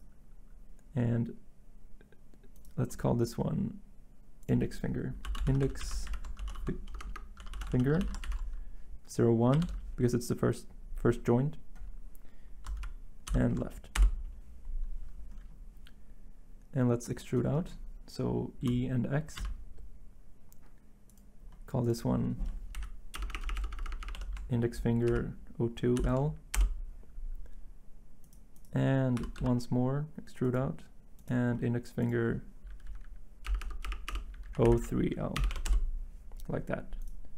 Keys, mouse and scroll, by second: 15.0-15.7 typing, 18.6-19.4 typing, 22.7 Right, 23.2-26.0 typing, 26.5 Return, 27.1-27.9 typing, 29.1-29.9 typing, 32.8 Right, 33.5 BackSpace, 33.6 BackSpace, 33.8 BackSpace, 34.1 BackSpace, 34.5 Left, 34.6 Left, 35.4 BackSpace, 35.5 3, 35.7 Return.